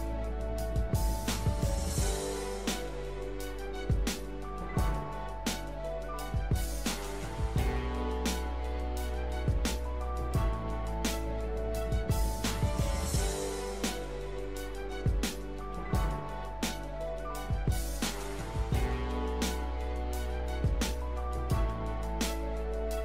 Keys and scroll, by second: 8.0 l, 21.6 l.